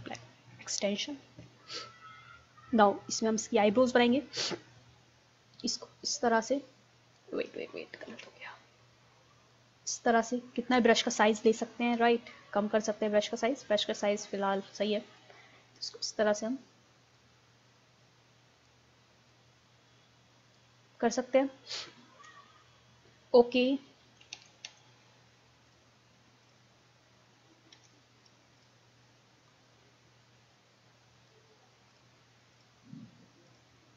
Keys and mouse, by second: 0.0 Return, 0.6-2.6 middle drag, 5.8-7.6 drag, 8.1 ctrl+z, 11.3 ctrl+z, 15.2-18.8 drag, 24.1 ctrl+z, 24.4 ctrl+z, 24.7 ctrl+z, 27.8 w, 32.9 click.